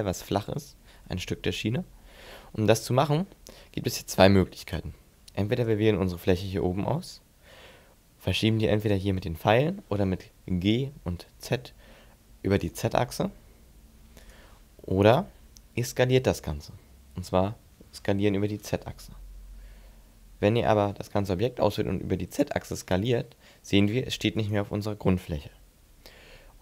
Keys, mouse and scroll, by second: 3.1 middle click, 4.5 click, 5.3 right click, 8.6 click, 10.6 g, 14.1 right click, 17.4 s, 18.4 right click, 19.3 a, 19.7 a, 20.4 s, 24.3 right click.